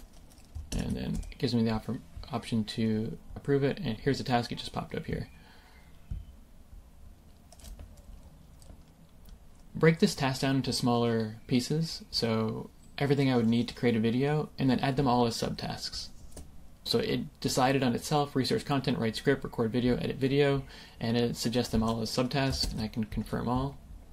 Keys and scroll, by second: 0.6 super+Return, 22.5 super+Return.